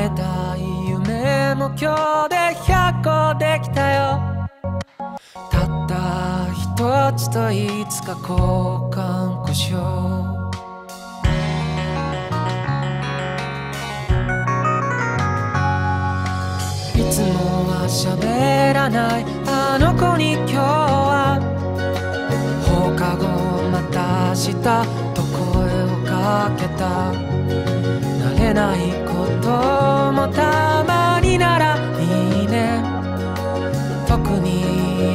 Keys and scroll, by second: 2.8 ctrl+z, 3.4 ctrl+z, 3.9 ctrl+z, 11.7 ctrl+z, 12.2 ctrl+z, 13.2 ctrl+z, 14.1 ctrl+z, 15.7 ctrl+z, 16.4 ctrl+z, 19.0 ctrl+z, 20.2 ctrl+z, 21.2 ctrl+z, 22.2 ctrl+z, 22.5 ctrl+z, 22.7 ctrl+z, 26.0 ctrl+e, 27.8 ctrl+z, 28.4 ctrl+z, 28.9 ctrl+z, 29.8 ctrl+z, 31.4 ctrl+z, 33.3 ctrl+z, 33.7 ctrl+z, 34.1 ctrl+z.